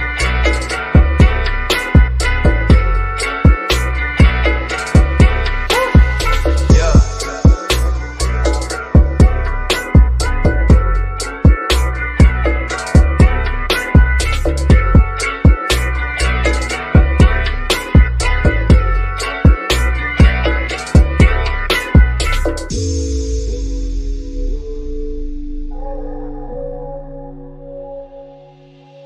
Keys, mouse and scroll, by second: 1.0 scroll up 1, 2.9 shift+click, 9.4 click, 10.0-10.4 scroll down 1, 11.5 click, 14.1-17.7 shift+middle drag, 17.7 click, 24.6 right click, 28.7 click.